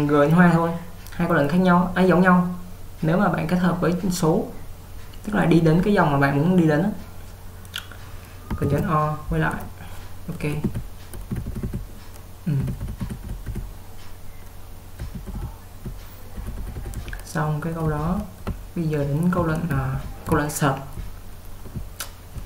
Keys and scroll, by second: 8.8 ctrl+o, 10.7-13.5 typing, 15.1-22.4 typing.